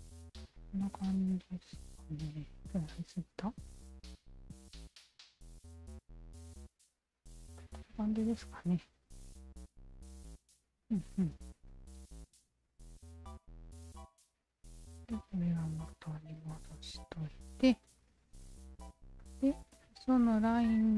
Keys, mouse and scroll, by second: 0.4 alt+click, 1.6 shift+z, 2.2 shift+z, 2.6 alt+click, 5.1-6.2 alt+shift+drag, 6.6 shift+z, 7.6-11.6 alt+drag, 12.6 ctrl+s, 13.4 alt+click, 14.2 alt+click, 14.6 alt+click, 15.4 alt+click, 15.9 alt+click, 16.4 alt+middle click, 17.1 alt+middle click, 17.6 alt+right click, 18.6 ctrl+s, 18.8 q, 19.2-20.4 alt+drag, 20.7 alt+click.